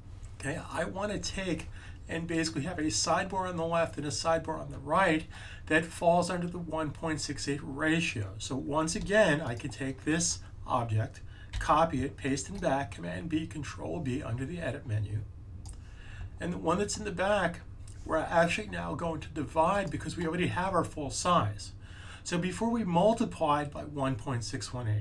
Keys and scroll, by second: 11.4 super+c.